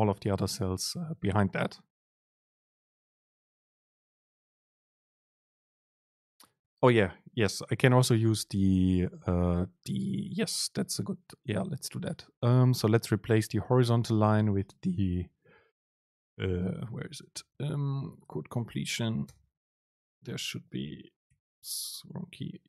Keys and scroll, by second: 17.2 super+Right, 18.0 Up, 18.3 ctrl+shift+super+Left, 18.6 ctrl+shift+super+Right, 19.4 super+space.